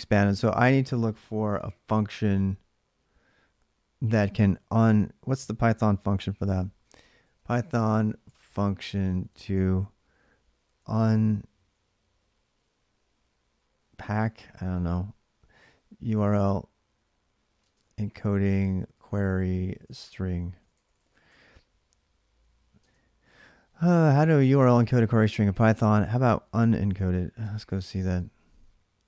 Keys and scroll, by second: 5.6 ctrl+a, 5.9-11.0 typing, 13.8-21.4 typing, 22.5 typing, 26.6-28.0 typing.